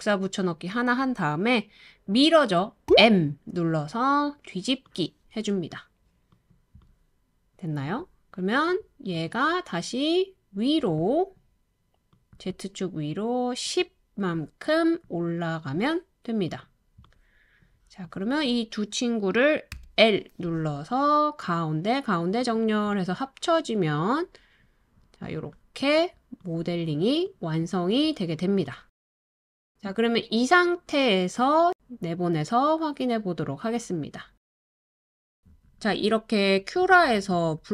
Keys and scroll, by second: 2.9 m, 19.7 l, 33.1-35.9 typing.